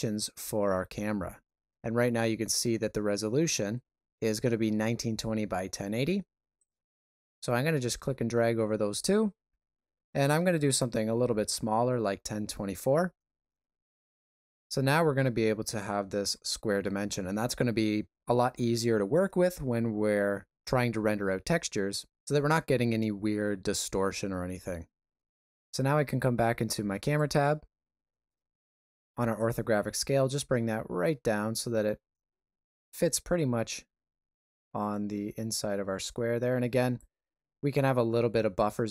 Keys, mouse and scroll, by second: 6.6 click, 15.0 shift+middle click, 15.9 ctrl+middle click, 27.0 click, 29.3 click.